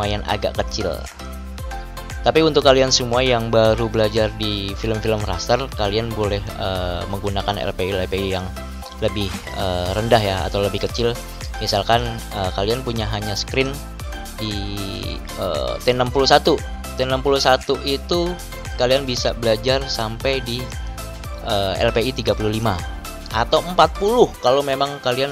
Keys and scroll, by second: 10.0 ctrl+-.